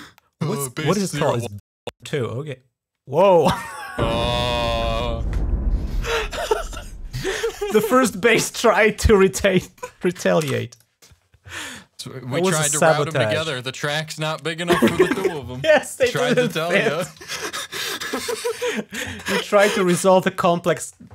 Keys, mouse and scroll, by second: 1.3 click, 5.7 r, 10.5 click.